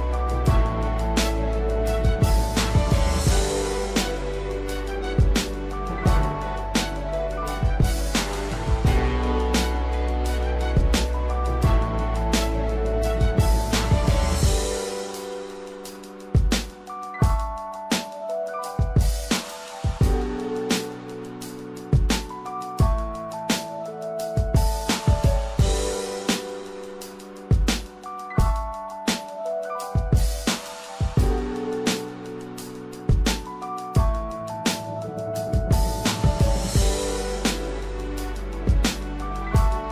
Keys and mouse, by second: 0.6 shift+middle click, 1.1 click, 1.9-3.0 drag, 3.4 shift+middle click, 4.9-7.2 drag, 7.5 shift+middle click, 8.5-10.1 drag, 10.6 shift+middle click, 11.2 middle click, 14.4 shift+middle click, 18.8 shift+middle click, 20.2 shift+middle click, 21.2 shift+middle click, 22.1 shift+middle click, 26.5 click, 28.6 shift+middle click, 29.4 shift+middle click, 32.4-35.3 drag, 35.8 shift+middle click, 37.0 ctrl+r.